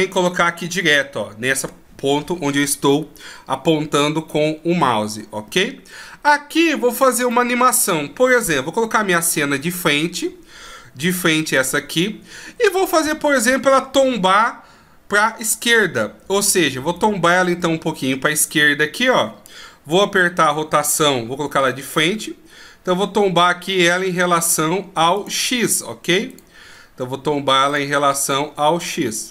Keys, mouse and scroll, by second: 7.6 middle click, 9.1 KP_1, 11.5-12.2 ctrl+scroll up 3, 12.7-14.3 scroll down 1, 17.2 right click, 21.3 KP_1, 22.4 r, 26.6 right click, 26.9 r, 28.5 right click, 28.8 r.